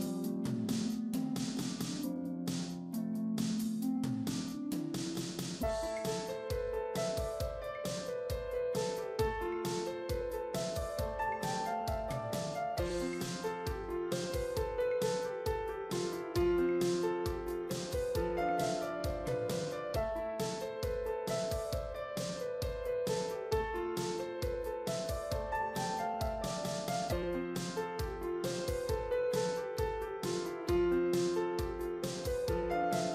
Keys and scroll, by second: 14.5 ctrl+t.